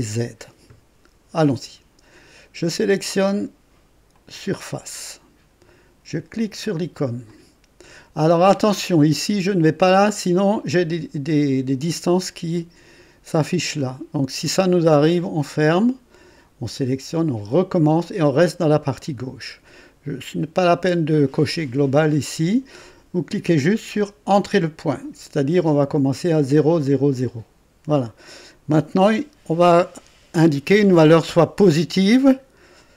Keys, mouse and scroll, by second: 4.1 click, 7.2 click, 15.4 click, 17.5 click, 27.1 click.